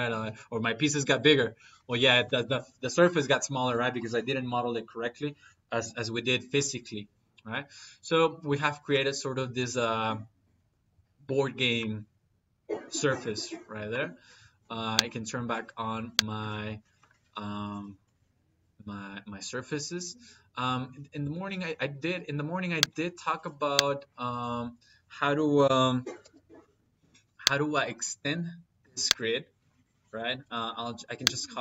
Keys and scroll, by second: 25.5 c, 26.0 p, 26.1 y, 26.3 space.